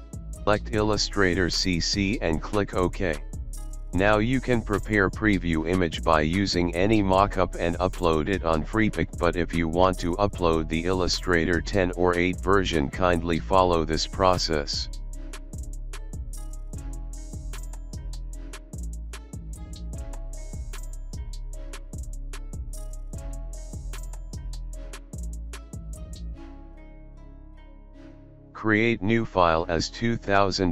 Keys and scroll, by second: 15.9 ctrl+n, 20.1 ctrl+a, 20.5 KP_3, 20.7 KP_0, 20.9 n, 26.3 ctrl+a, 26.8 KP_3, 27.0 KP_0, 29.4 ctrl+KP_3, 29.7 KP_0, 30.3 KP_0.